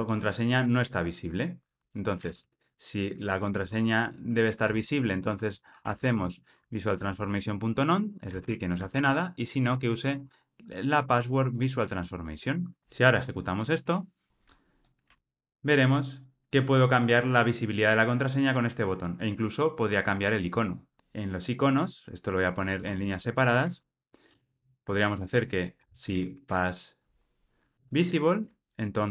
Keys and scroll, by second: 3.1 Return, 13.0 ctrl+r, 22.7 alt+Return, 27.7 Return.